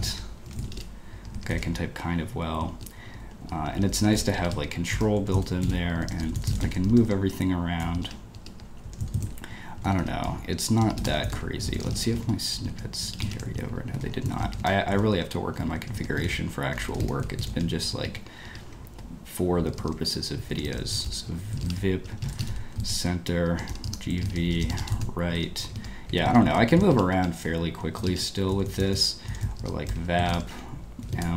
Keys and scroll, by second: 0.0-2.0 typing, 1.2 Escape, 3.0 ctrl+a, 3.2 ctrl+a, 3.8-6.4 typing, 6.9 Escape, 7.0 Escape, 7.8-17.8 typing, 8.3 ctrl+d, 10.5 Escape, 12.7 Escape, 13.8 ctrl+u, 13.9 ctrl+u, 15.8 Escape, 18.4 ctrl+d, 18.6 ctrl+u, 19.8-27.2 typing, 20.5 Escape, 27.3 ctrl+u, 28.1 ctrl+d, 28.2-31.3 typing.